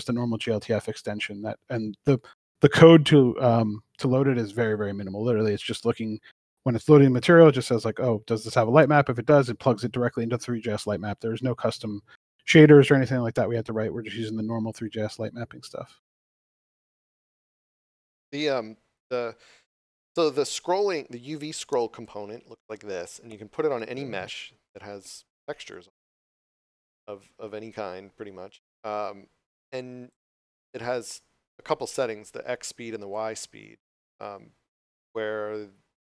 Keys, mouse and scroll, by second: 3.1 click, 7.9 middle click, 9.1 click, 18.3 d, 19.2 a, 19.6 w, 21.3 w, 25.6 click, 27.3 s, 28.3 s, 33.0 click, 34.1 d, 34.1 w.